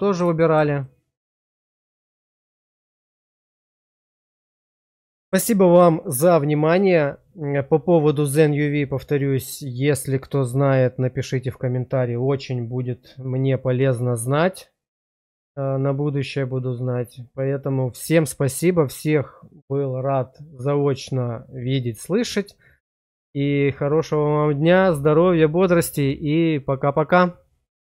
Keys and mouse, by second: 0.3 shift+middle click, 0.7-3.1 middle drag, 3.4 shift+middle click, 4.2 middle click, 5.0 shift+middle click.